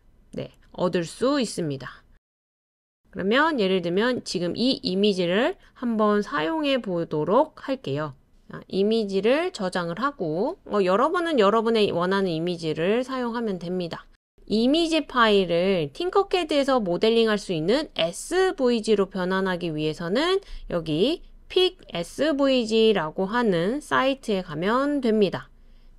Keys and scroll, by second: 0.0 typing, 11.9-14.3 typing, 17.1-17.8 typing, 21.9 super+ㅊ, 24.5 super+space.